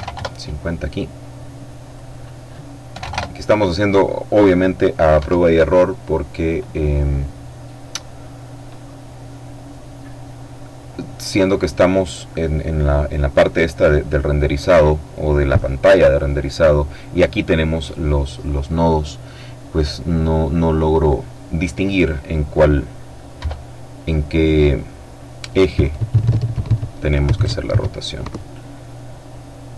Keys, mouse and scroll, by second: 0.8 click, 1.8 KP_5, 2.0 KP_Enter, 4.0 F12, 22.2 F12.